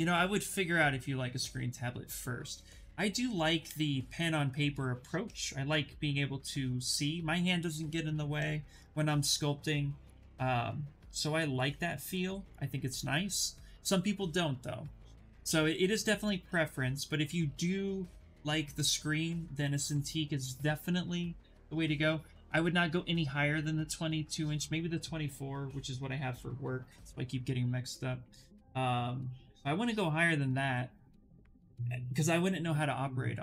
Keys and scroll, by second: 10.6 s.